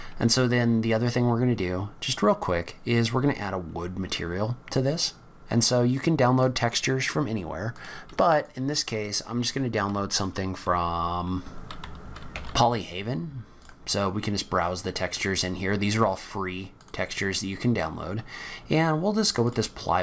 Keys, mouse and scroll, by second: 0.8 scroll down 3, 1.3-2.3 scroll up 2, 2.3 scroll down 1, 2.7-3.3 scroll up 3, 4.6-4.9 scroll down 1, 4.9 scroll up 1.